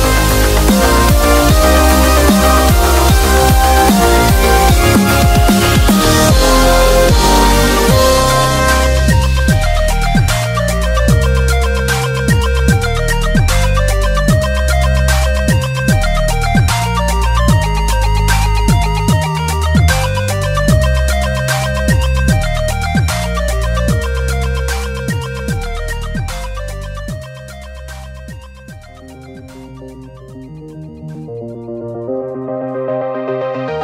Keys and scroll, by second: 8.1 super+-, 8.3 super+-, 10.1-10.8 typing, 14.0 typing, 15.8-16.1 typing, 18.5-19.1 typing, 22.1 ], 26.0 typing, 27.9 super+z, 32.1 super+-, 32.3 super+-, 32.4 super+-.